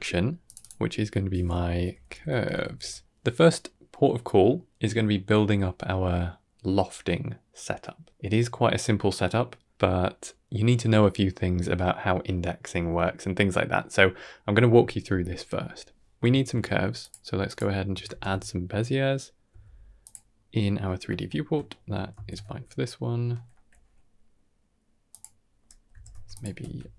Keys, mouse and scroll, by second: 0.3 click, 0.5-2.6 drag, 16.2 shift+a, 17.9 ctrl+space, 18.5 middle click, 19.4 s, 20.2 middle click, 21.1 shift+middle click, 22.0 shift+d, 25.8 g, 26.7 Tab.